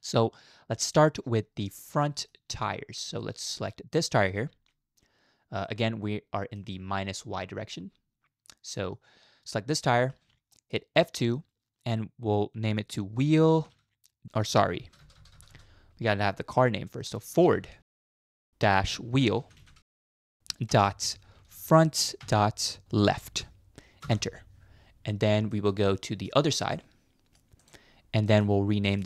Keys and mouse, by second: 1.0-1.4 middle drag, 2.0 shift+middle click, 3.2 shift+middle drag, 4.0 click, 5.6-6.6 middle drag, 7.8-9.0 middle drag, 9.8 shift+middle click, 10.5 middle click, 11.0 F2, 13.5 e, 15.2 BackSpace, 15.3 BackSpace, 19.6 e, 25.5-26.0 middle drag, 26.0-26.3 drag, 26.7-27.4 middle drag, 28.3 middle click, 29.0 shift+middle click.